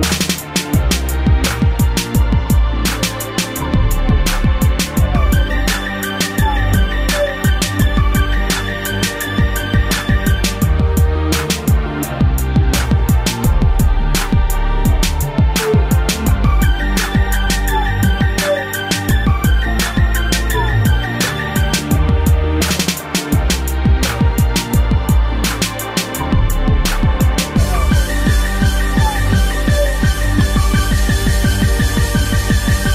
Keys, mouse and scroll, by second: 3.1 shift+click, 3.2 shift+click, 4.4 shift+click, 4.5 shift+click, 5.9 click, 7.0 ctrl+c, 8.5 click, 8.6 click, 10.3 click, 10.4 click, 11.7 click, 17.1 middle click, 18.2 click, 21.5 ctrl+v, 23.0 ctrl+z, 24.7 a, 26.0 b, 26.1 click, 27.5 Delete, 28.7 click, 28.8 click, 29.4 ctrl+v, 30.4 click, 31.4 shift+space, 32.5 Escape.